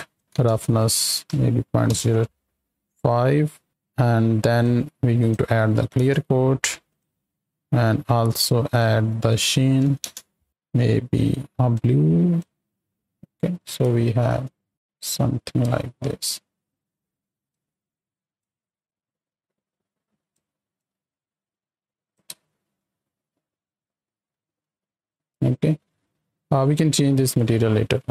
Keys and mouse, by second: 0.2-1.9 drag, 4.5-6.0 drag, 6.8 click, 8.6 click, 9.2 click, 13.0-13.5 middle drag, 13.8-14.2 shift+middle drag, 14.6-15.4 middle drag, 15.7 space, 17.4 space, 18.3-20.4 drag, 20.7-22.2 drag, 22.3 space, 22.7-23.8 middle drag, 24.0 space, 24.3 space, 25.5 space, 27.8 middle click.